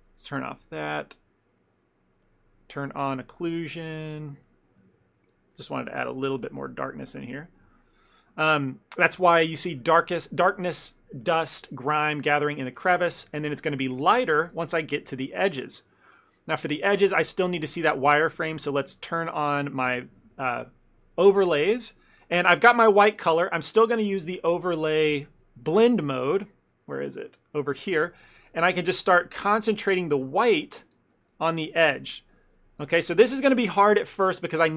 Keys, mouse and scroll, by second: 0.5 click, 1.7 middle click, 2.3 click, 4.1 click, 4.8 middle click, 4.9 ctrl+middle click, 5.4 click, 5.6 click, 6.1 ctrl+click, 6.1 ctrl+click, 6.3 click, 6.7 click, 6.9 ctrl+click, 7.3 middle click, 7.7 middle click, 7.8 ctrl+middle click, 7.8 ctrl+middle click, 8.1 middle click, 8.4 ctrl+middle click, 8.8 middle click, 9.3 shift+middle click, 9.4 shift+middle click, 13.3 shift+middle click, 13.5 ctrl+middle click, 14.0 shift+middle click, 14.5 f, 14.8 ctrl+middle click, 15.1 f, 15.4 shift+middle click, 15.9 middle click, 16.5 shift+middle click, 18.2 click, 19.6 middle click, 20.1 shift+middle click, 20.3 ctrl+middle click, 21.1 ctrl+middle click, 21.2 shift+middle click, 21.9 ctrl+middle click, 22.0 shift+middle click, 22.8 middle click, 23.0 middle click, 29.0 middle click, 29.0 click, 29.3 click, 30.2 click, 31.0 click, 32.0 click.